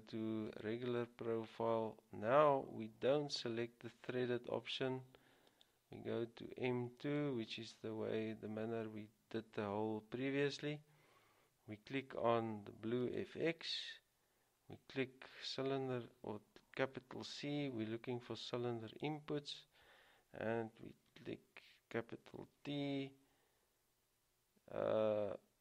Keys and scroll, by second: 17.2 c, 19.6 typing, 22.5 typing.